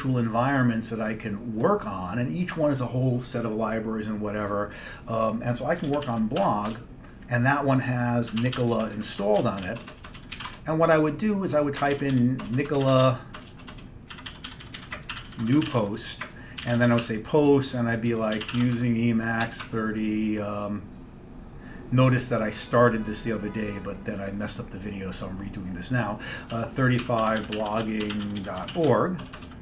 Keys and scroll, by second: 5.6-7.0 typing, 8.2-20.2 typing, 26.6-29.6 typing.